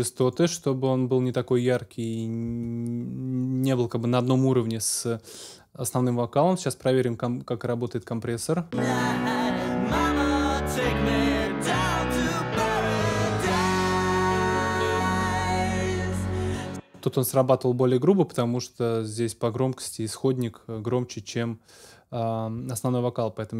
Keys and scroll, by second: 8.3 space, 16.4 space.